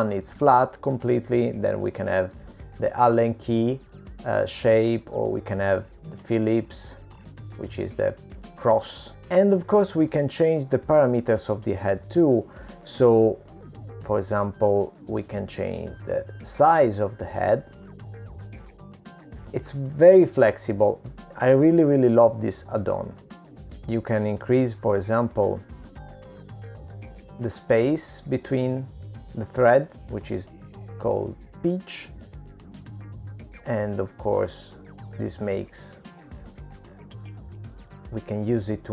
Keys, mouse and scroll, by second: 4.5 middle click, 6.6 click, 8.4 middle click, 12.2 middle click, 17.2 click, 21.0 middle click, 23.7 click, 29.1 middle click, 30.2-30.8 scroll down 4, 30.8 scroll up 1, 32.2 click.